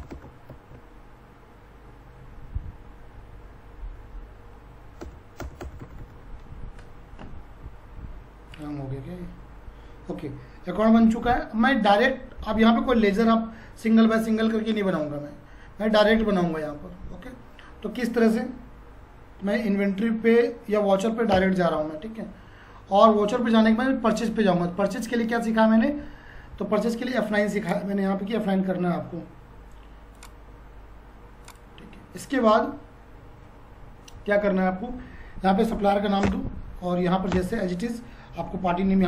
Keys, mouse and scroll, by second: 28.1-30.6 drag, 35.9 1, 36.2 Return.